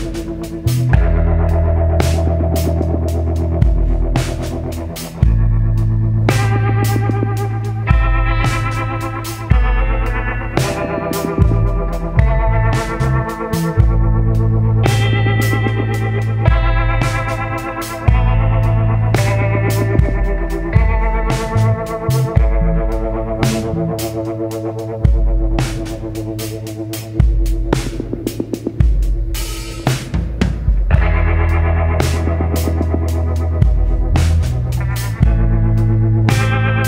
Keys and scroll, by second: 7.8 ctrl+z, 32.7 ctrl+y, 33.1 ctrl+z, 33.6 scroll, 34.1 scroll.